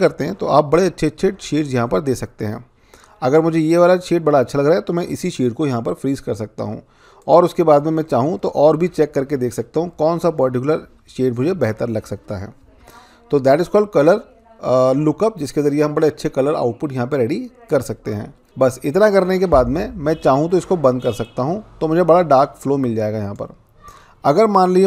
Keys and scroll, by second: 0.1 Down, 0.7 Down, 1.1 Down, 1.7 Down, 7.8 Down, 8.4 Down, 8.8 Down, 9.3 Down, 9.8 Down, 10.2 Down, 10.8 Down, 11.5 Down, 12.0 Down, 12.6 Down, 13.3 Down, 13.9 Down.